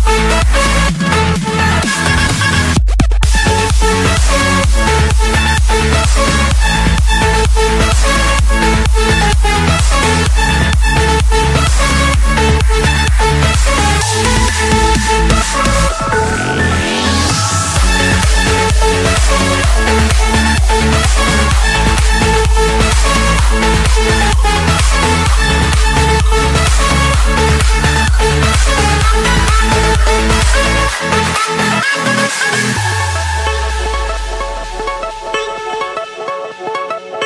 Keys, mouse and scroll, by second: 0.9 click, 1.5-2.5 right drag, 2.5-3.5 drag, 3.6-4.7 drag, 9.9 click, 10.7-11.7 typing, 12.2 Return, 13.5-16.1 typing, 14.5 Return, 15.7 right click, 16.7 click, 17.9 click, 21.2-23.4 typing, 23.7 Return, 24.9 click, 25.6 click, 25.7 Return, 27.2 Escape, 28.2 click, 29.2 click, 29.4-29.8 scroll, 30.6 click, 31.4 click, 31.8-32.5 scroll, 33.1 click, 33.7-34.1 scroll, 34.2 middle click, 35.3 click, 35.6 middle click, 36.3 click, 36.7 middle click.